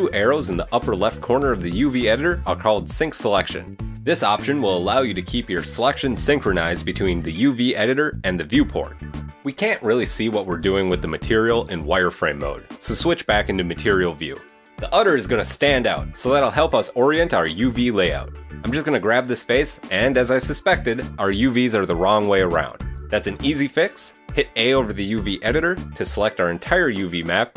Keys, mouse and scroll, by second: 12.3 click, 12.8 middle click, 14.7 click, 15.2 shift+middle click, 15.5 middle click, 18.1 g, 24.2 a.